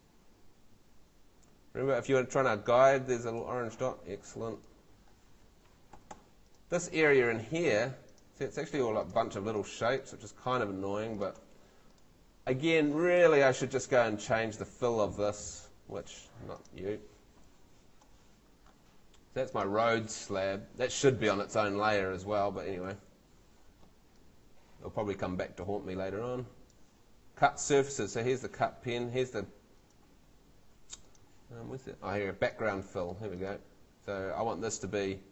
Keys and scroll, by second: 5.9 Home, 8.8 Escape.